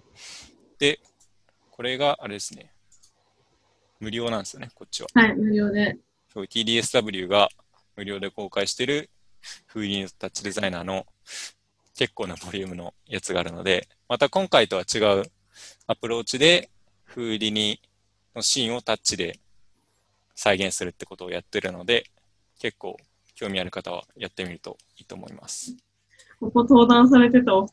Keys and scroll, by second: 27.6 alt+Tab.